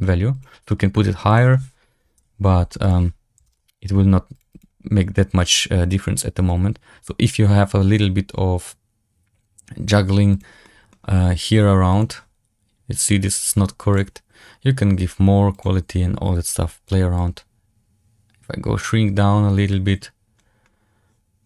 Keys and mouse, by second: 0.2 click, 1.2 click, 2.7 click, 4.5 click, 10.5 middle drag, 11.9 click, 17.4-19.1 drag.